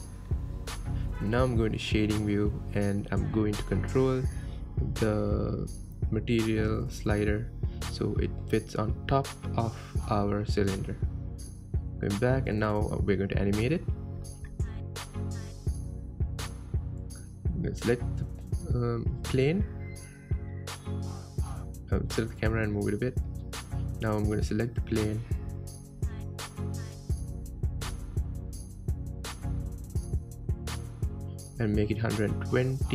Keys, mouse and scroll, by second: 1.4 click, 3.5 click, 6.8-10.3 drag, 13.2 click, 18.3 click, 19.5 click, 20.4 g, 25.4-25.8 middle drag, 25.8-26.1 scroll down 6, 27.3 KP_7, 28.1 scroll down 3, 28.8-32.9 shift+middle drag.